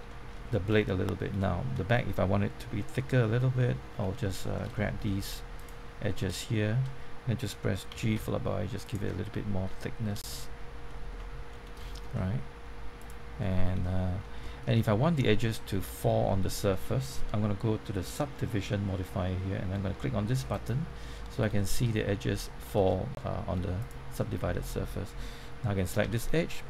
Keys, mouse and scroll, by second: 0.0 shift+middle click, 2.7 Tab, 2.9-4.6 middle drag, 4.7 shift+middle click, 5.5 click, 7.6-8.6 typing, 8.8 click, 9.0-10.7 middle drag, 10.8 ctrl+middle click, 11.8 shift+middle click, 12.9 click, 13.3 middle click, 13.7 shift+middle click, 14.8-17.3 shift+middle drag, 18.0 click, 21.1 middle click, 21.5 shift+middle click, 23.1 middle click, 23.7 click, 24.1-25.3 middle drag, 25.9 g.